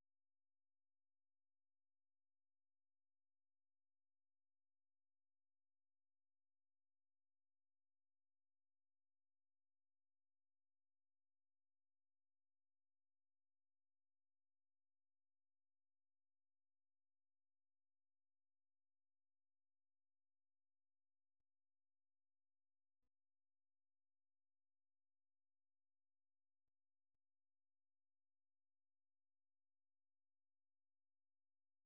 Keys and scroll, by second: 2.0-3.0 typing, 4.2 typing, 5.5-6.2 typing, 19.4-20.1 typing, 31.1 ctrl+c.